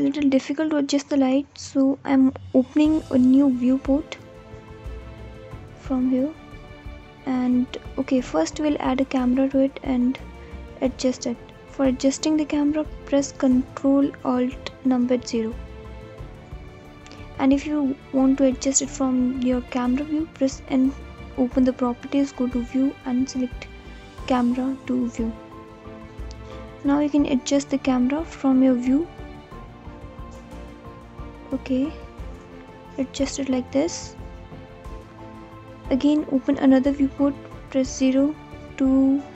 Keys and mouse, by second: 1.1 click, 6.9-7.9 drag, 12.9 ctrl+alt+KP_0, 19.2 n, 21.2 click, 22.7 click, 24.9 n, 29.8-31.1 alt+middle drag, 31.1 alt+click.